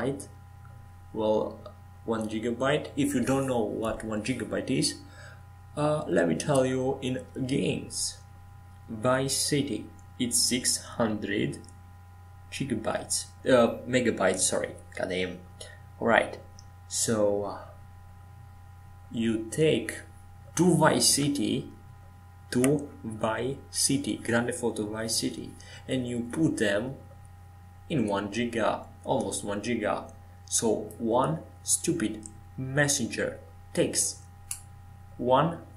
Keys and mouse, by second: 1.4-2.6 drag, 2.6 middle click, 3.2 shift+d, 7.8 middle click, 11.0-12.8 middle drag, 13.0-17.1 middle drag, 17.1 shift+d, 20.6 click, 20.9 middle click, 21.3 middle click, 22.4 middle click, 23.0-25.7 middle drag, 23.9-25.7 drag, 23.9-25.9 right drag, 25.9-27.7 middle drag, 28.5 shift+d, 33.3 shift+d.